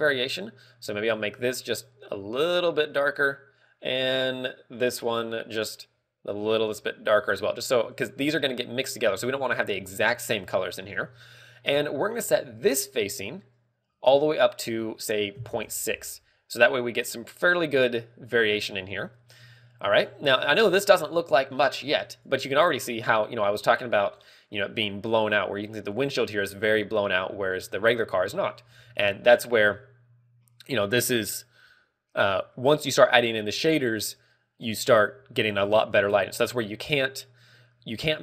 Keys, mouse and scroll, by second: 13.1 click, 13.1 scroll up 3.